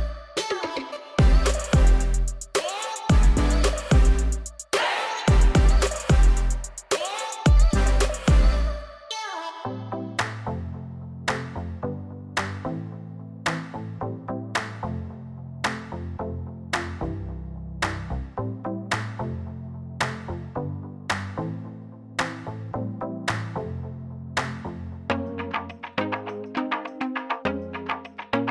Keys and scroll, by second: 7.4 ctrl+z.